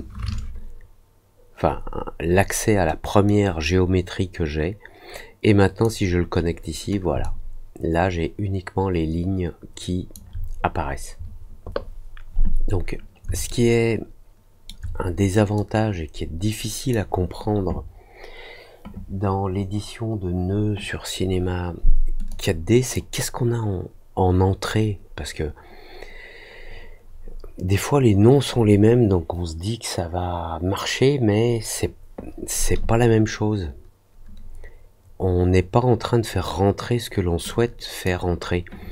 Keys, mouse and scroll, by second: 3.2-5.8 drag, 7.2-10.1 alt+drag, 13.4-14.6 alt+middle drag, 15.5-16.8 drag, 22.2 click, 37.4-38.0 drag.